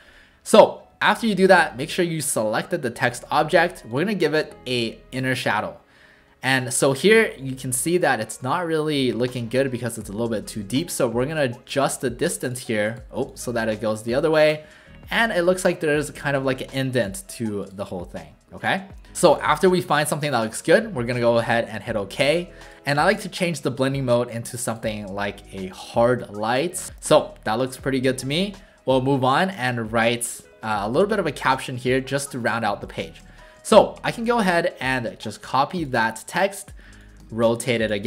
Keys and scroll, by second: 33.2 w.